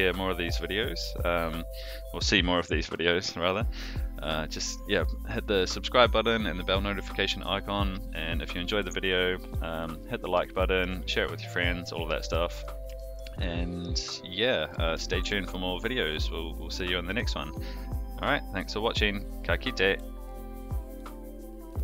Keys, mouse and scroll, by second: 8.6 click, 10.5 shift+middle drag, 11.1-11.5 middle drag, 12.1 shift+middle click, 12.5 middle drag, 12.9 shift+middle drag, 13.4-13.9 middle drag, 14.3-14.7 middle drag, 15.0 shift+middle drag, 15.5-19.4 middle drag.